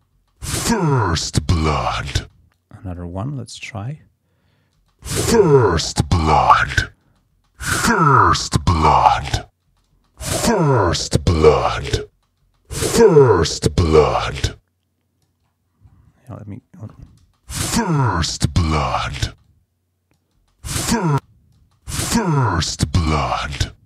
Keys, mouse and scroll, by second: 1.4 click, 2.2 space, 2.5 click, 3.1 scroll up 1, 3.6-4.2 scroll down 1, 4.4 scroll up 1, 4.8 space, 4.9-7.9 drag, 7.1 space, 9.7 space, 12.1 space, 15.5 scroll up 2, 15.9-16.8 scroll down 4, 17.0 space, 19.3 space, 19.5 click, 20.4 space, 21.0 click, 21.1 space.